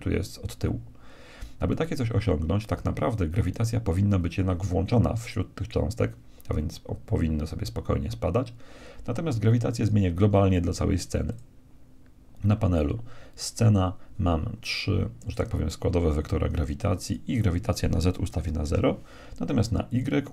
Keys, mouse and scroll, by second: 1.6-3.4 middle drag, 3.4-5.3 right drag, 5.3-6.9 drag, 9.9-13.1 drag, 17.1-18.7 drag, 19.9-20.3 drag.